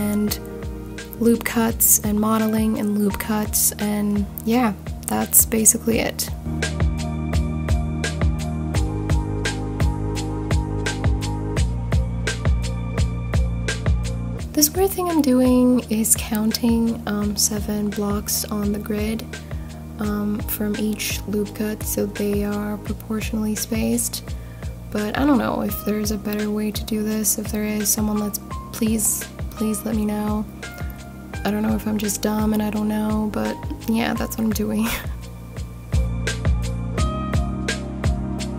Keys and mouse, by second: 0.1 g, 1.7 click, 2.9 g, 3.1 g, 7.2 click, 17.0 g, 17.2 g, 18.8 click, 22.1 click, 22.4 g, 22.6 g, 24.4 click, 26.9 ctrl+b.